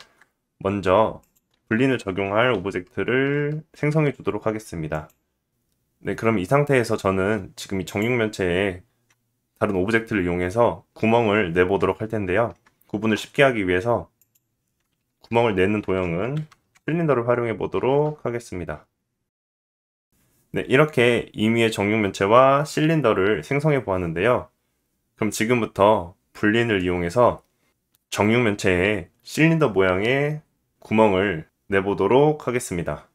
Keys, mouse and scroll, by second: 0.0 shift+a, 2.5 s, 4.9 click, 9.4 shift+a, 15.5 r, 16.7-33.1 middle drag, 17.7 g.